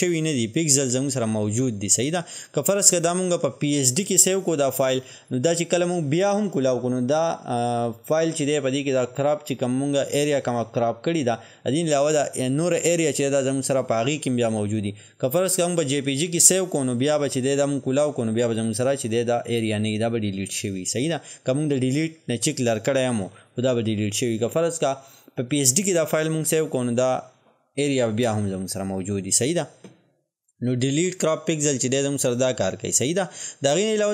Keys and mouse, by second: 1.2-34.1 drag.